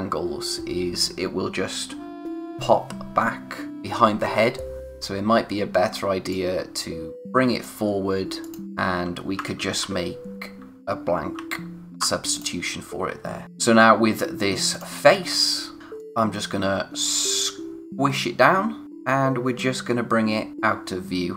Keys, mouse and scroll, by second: 4.8-6.3 scroll up 1, 6.3 click, 11.3 alt+shift+r, 12.3 click, 13.4-14.6 scroll up 1, 14.7 click, 15.2 scroll down 1, 15.5 space, 15.8 scroll up 1, 15.9 click, 18.8-19.5 scroll up 1, 19.5 click.